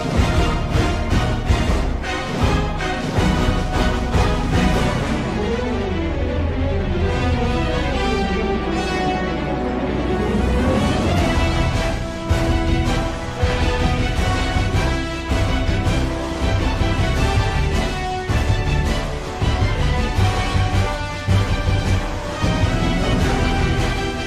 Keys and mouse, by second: 0.3 click, 7.3 z, 21.5 click.